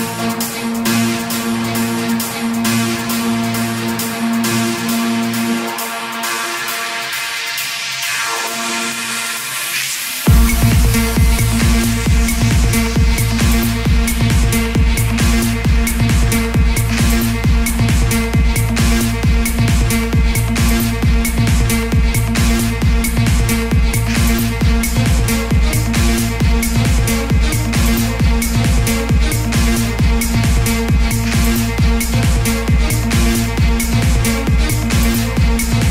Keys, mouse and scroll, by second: 0.3-6.2 drag, 9.9-10.3 typing, 13.6 click, 14.5 ctrl+d, 16.0-24.4 drag, 26.6 typing, 31.3 click, 32.0 ctrl+d, 33.0-35.9 drag.